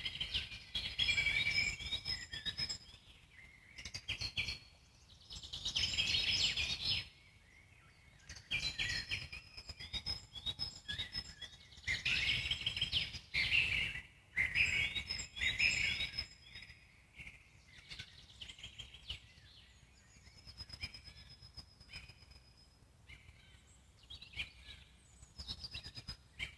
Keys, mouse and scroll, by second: 0.6 alt+middle click, 1.2-1.8 scroll up 1, 1.8-4.9 ctrl+drag, 4.9-5.6 scroll down 4, 5.6-6.6 scroll up 1, 6.6 f, 7.2 middle click, 8.0-9.8 ctrl+drag, 9.8 middle click, 10.1 shift+click, 11.0-12.8 alt+middle drag, 12.8 shift+click, 13.7 alt+middle click, 14.7-16.5 drag, 16.5-17.8 alt+middle drag, 17.8 shift+click, 18.8-25.5 alt+middle drag, 26.1-26.5 middle drag.